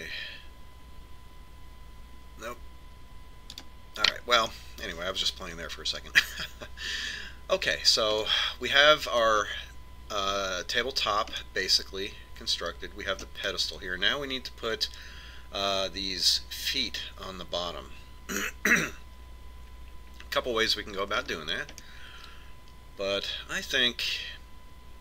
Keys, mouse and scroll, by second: 5.0-6.7 middle drag, 8.7-11.6 middle drag, 11.6 scroll down 1, 11.9-13.7 middle drag, 21.6-24.1 middle drag, 24.1 middle click.